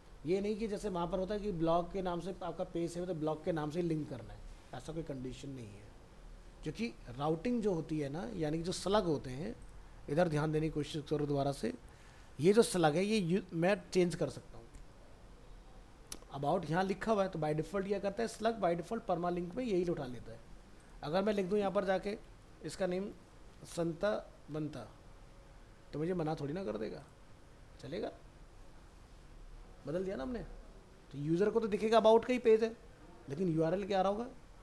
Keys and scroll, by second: 7.6 alt+Tab, 22.4 ctrl+a.